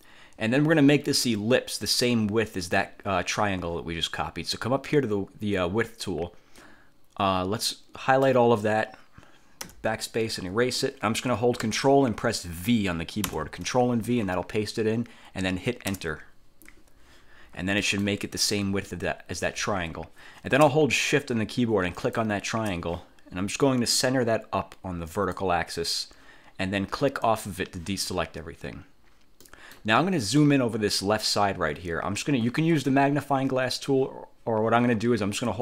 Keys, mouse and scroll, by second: 6.7-8.6 drag, 9.8 BackSpace, 13.4 ctrl+v, 16.0 Return, 17.9 click, 22.1 shift+click, 25.2 click, 27.4 click, 29.5 middle click.